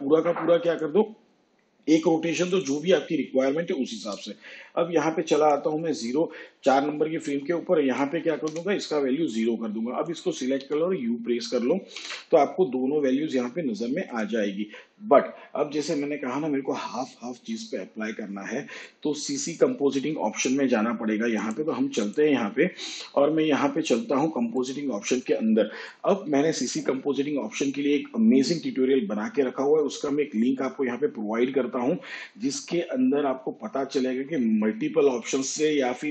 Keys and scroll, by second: 8.5 0, 10.6 u, 12.0 u.